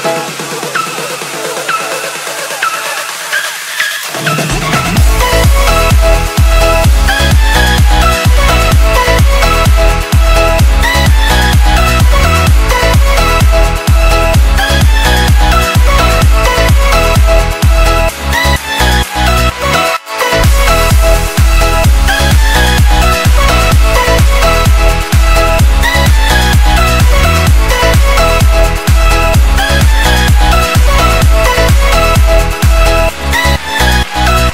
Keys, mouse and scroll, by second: 2.3 click, 6.9 click, 10.8 Right, 15.6 0, 16.5 click, 23.9 alt+Num_Lock, 24.0-24.6 alt+scroll up 1, 24.6 alt+scroll up 1, 25.2 click.